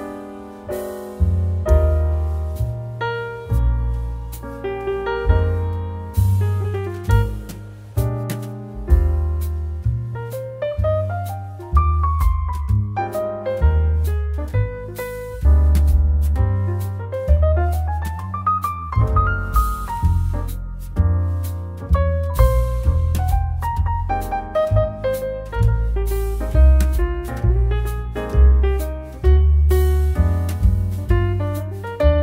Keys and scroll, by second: 27.7 ctrl+j.